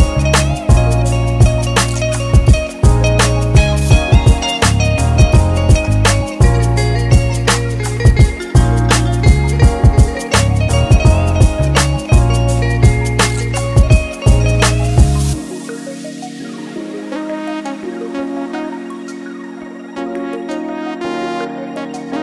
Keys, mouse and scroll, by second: 0.8 a, 1.4 click, 2.3 middle click, 3.6 alt+click, 4.9 e, 8.8 alt+m, 10.4-11.1 scroll down 3, 10.6-11.1 scroll up 1, 11.4 ctrl+r, 11.4 scroll up 1, 14.0 ctrl+r, 15.8 scroll down 1, 16.6 ctrl+r, 19.2 KP_1, 19.7 scroll up 2, 19.9 middle click, 20.3-20.7 scroll down 2, 20.9 Tab, 21.7 click.